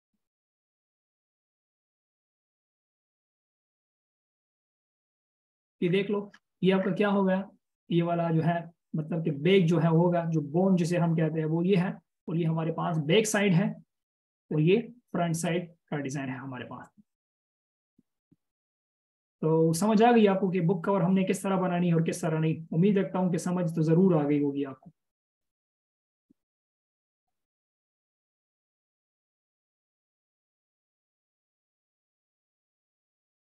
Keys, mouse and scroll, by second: 20.9 right click.